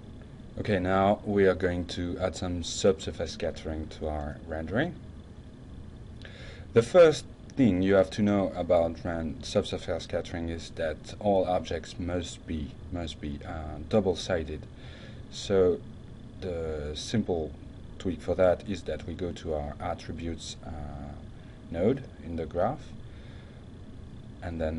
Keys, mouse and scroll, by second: 0.3-1.9 drag, 1.7-2.4 typing, 13.1 click, 14.1 click, 15.2 click, 16.1 click, 17.4 click, 18.0 click, 18.9-21.3 drag, 22.3 click.